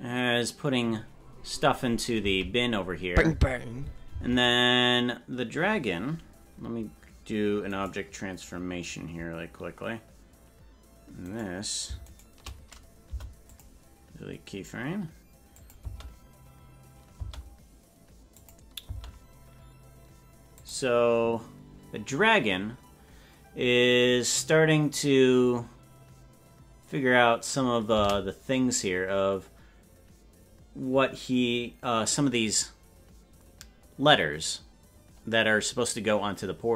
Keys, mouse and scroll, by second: 0.0 space, 2.3 space, 4.2 space, 7.6-13.0 right drag, 13.0 Delete, 15.6-18.6 drag, 15.8 space, 17.2 space, 18.8 space, 20.6 click, 30.3 space.